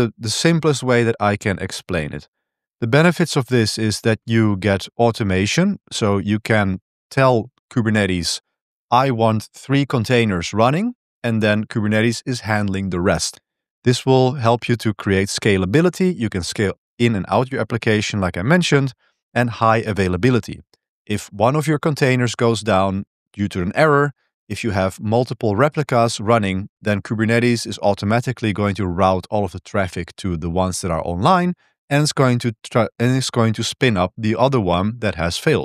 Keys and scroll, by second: 2.2-3.9 typing.